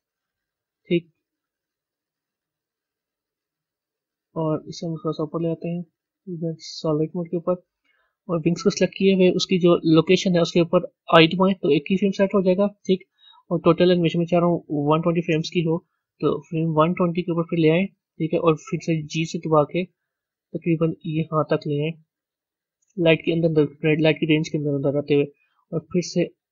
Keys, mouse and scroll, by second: 4.6-7.0 drag, 7.0 z, 11.5 i, 17.4-19.0 drag, 19.0 g.